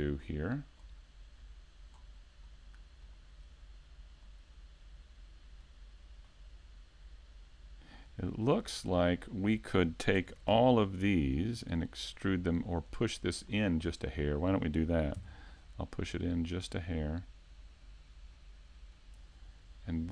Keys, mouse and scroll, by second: 0.2 scroll up 1, 0.8-2.0 scroll down 1, 2.0 scroll down 1, 2.5 middle click, 4.2 middle click, 8.7-9.1 scroll up 1, 10.2 ctrl+Tab, 11.3 right click, 12.9 right click, 13.5 middle click, 15.1 middle click, 19.1 click.